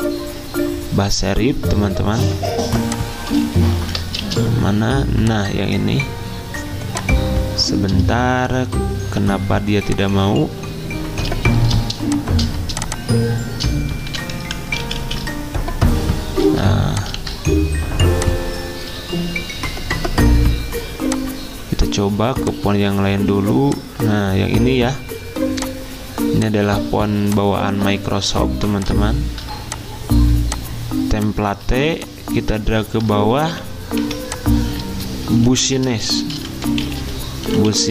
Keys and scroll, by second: 3.6-4.7 typing, 14.1-14.4 typing, 14.9 ctrl+z, 15.0 ctrl+z, 17.2 ctrl+a, 33.5-34.0 typing, 35.5 ctrl+a, 36.1-37.9 typing.